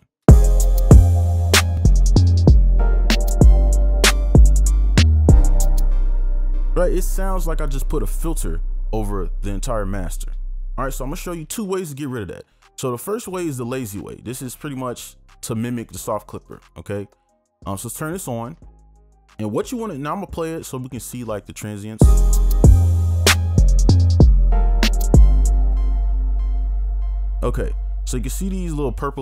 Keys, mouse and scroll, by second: 0.3 space, 22.1 space, 25.7 space.